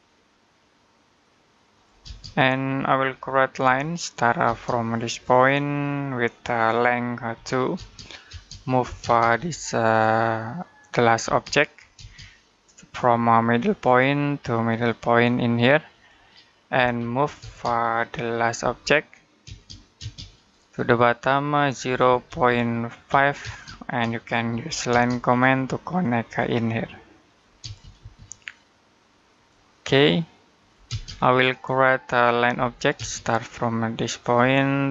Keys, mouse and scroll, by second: 2.0-2.6 scroll down 1, 2.6 middle click, 3.4 l, 4.3 space, 4.9 click, 7.2 2, 7.6 space, 8.7 m, 8.8 space, 9.2 l, 11.1 space, 13.5 click, 16.6 m, 17.2 space, 19.3 space, 20.2 click, 21.7 0, 22.9-23.2 typing, 24.3 l, 24.7 space, 25.1-26.0 scroll up 1, 26.0 click, 27.5 space, 29.2 click, 30.7 space, 30.9-31.2 scroll down 1, 31.2 middle click, 32.4 l, 32.8 space, 34.0 click.